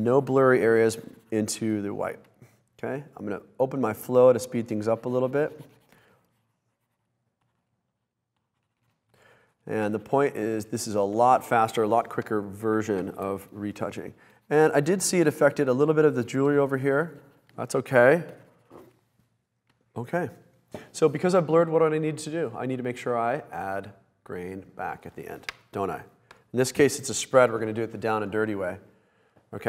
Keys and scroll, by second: 3.3 space, 3.8 space, 8.1 space, 12.7 super+-, 19.7 space.